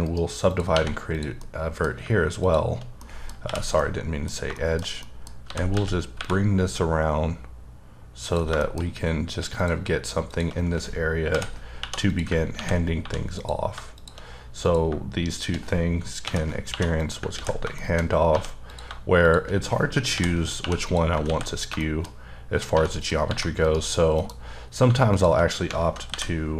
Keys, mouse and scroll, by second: 0.0 right click, 0.5 click, 0.7 1, 1.1 click, 1.4 middle click, 2.4 shift+click, 3.0 middle click, 3.4 j, 3.8 middle click, 4.8 shift+scroll up 1, 5.0 middle click, 5.4 g, 5.7 x, 6.1 y, 8.3 click, 8.6 shift+middle click, 8.8-9.3 scroll up 2, 9.6 click, 11.3 j, 11.8 j, 12.1 click, 12.5 ctrl+x, 13.0 1, 13.4 click, 16.2 j, 16.7 j, 17.0 click, 17.4 ctrl+x, 17.8 shift+middle click, 18.3 1, 18.7 click, 19.2 click, 20.1 j, 20.6 j, 20.8 click, 21.3 x, 21.8 shift+middle click, 22.7 1, 23.0 click, 23.3 g, 23.6 right click, 24.2 KP_Decimal, 24.6 scroll up 3, 25.1 shift+click, 26.1 m.